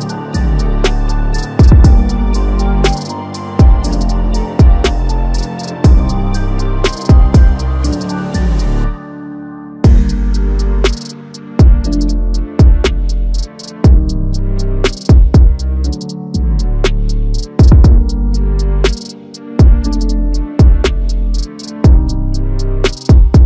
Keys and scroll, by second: 5.2 ctrl+shift+t, 6.5 ctrl+t, 7.2 ctrl+t, 9.4 ctrl+shift+t, 15.8 alt+Tab, 16.5 ctrl+c, 16.6 alt+Tab, 17.3 ctrl+v, 17.5 ctrl+a.